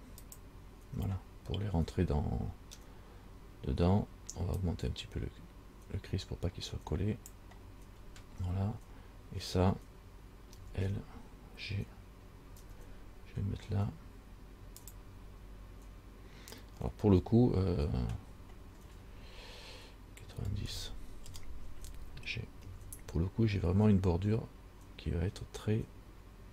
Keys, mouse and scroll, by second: 2.7 scroll up 2, 4.8 click, 8.2 scroll down 2, 10.8 l, 12.8 g, 17.3 r, 22.8 g.